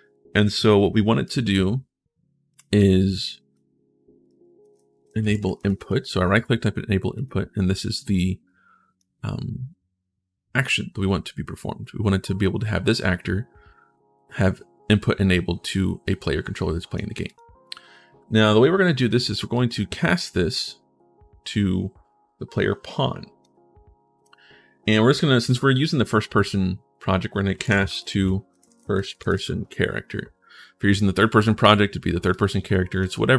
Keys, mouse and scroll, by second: 1.0 right click, 2.6 click, 4.0-5.5 typing, 6.9 click, 7.5-8.7 drag, 15.8 click, 17.0 click, 19.3-23.2 drag, 27.0-29.8 typing, 31.3 click, 32.1 click.